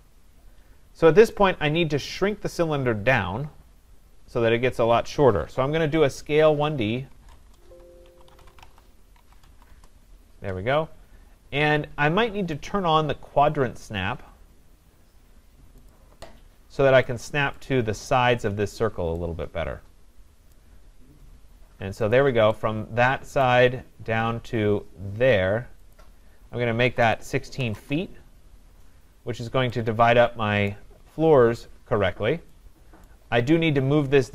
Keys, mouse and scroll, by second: 1.3 right click, 2.1-2.7 scroll, 6.5 a, 6.5 middle click, 7.5-9.2 typing, 15.9 click, 16.5 middle click, 16.6 middle click, 17.5-18.2 scroll, 17.6 right click, 20.5 right click, 22.1 click, 23.4 right click, 23.8-24.1 scroll, 25.5 scroll up 6, 26.0 click, 26.6-27.6 typing, 27.8 Return, 28.2 scroll, 28.7-29.3 scroll, 30.7 right click, 31.3 scroll, 33.1 right click.